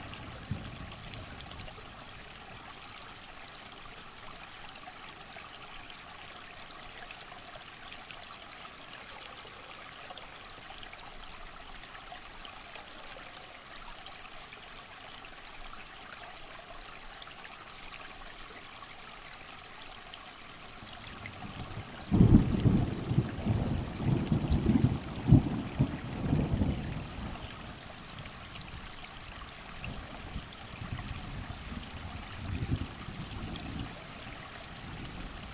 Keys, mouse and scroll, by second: 1.3 scroll down 2, 1.7-2.2 scroll up 2, 2.7 alt+click, 3.9 shift+click, 7.3 alt+scroll down 2, 8.0 ctrl+scroll up 1, 8.3-8.8 alt+scroll down 2, 8.6 click, 10.8 click, 11.7 alt+scroll up 1, 12.2 click, 12.4 alt+scroll down 1, 13.3 click, 14.5 alt+scroll up 1, 15.5-17.7 drag, 17.7 alt+scroll down 1, 18.0-20.2 scroll up 1, 20.2 click, 21.2 ctrl+scroll down 1, 21.4-22.0 scroll up 1, 22.5-24.5 drag, 25.5 alt+scroll up 1, 26.7-28.0 drag, 28.9 alt+scroll down 1, 29.2 alt+scroll up 1, 29.4 click, 29.9 alt+scroll down 1, 30.2 alt+scroll up 1, 30.5 alt+scroll down 1, 31.3 click, 32.2 alt+scroll up 1, 33.2 click, 33.5-34.2 ctrl+scroll up 1, 34.2 click, 35.4 alt+scroll up 1.